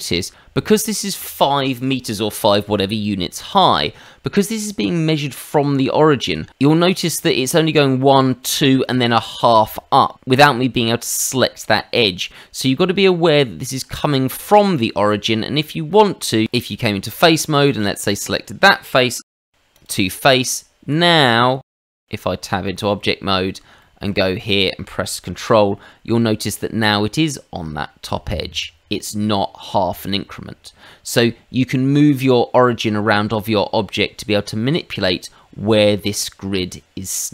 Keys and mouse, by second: 14.4 middle click, 15.2 Tab, 17.6 click, 19.2 shift+s, 19.7 click, 20.8 Escape, 21.6 Tab, 22.9 middle click, 23.8 shift+middle click, 24.2 middle click.